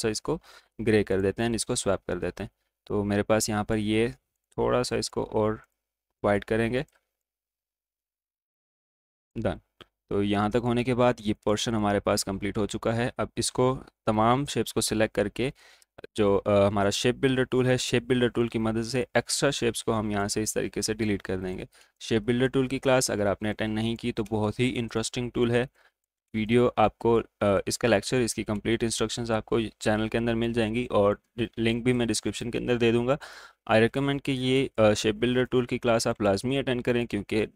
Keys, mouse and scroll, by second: 4.5-9.3 drag, 11.8-16.9 drag, 17.2-17.7 alt+scroll up 1, 18.7-21.8 alt+drag, 21.8 space, 21.9 click, 22.6 space, 23.7 alt+click, 24.8 space, 25.8 alt+click, 26.3 space, 28.1-29.4 alt+drag, 30.0 alt+click, 30.8 space, 32.7 alt+click, 34.0 space, 35.7 alt+click.